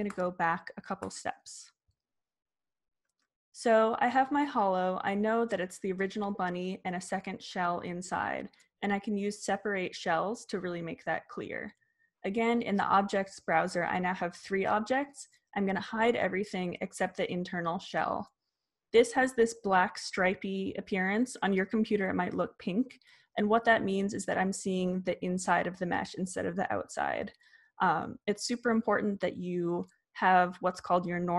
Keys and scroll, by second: 0.4 super+z.